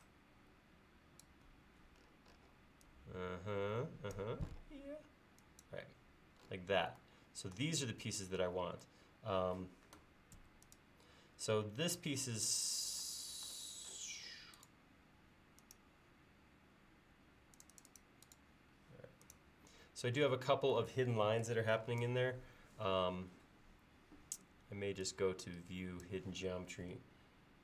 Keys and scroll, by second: 10.5 space.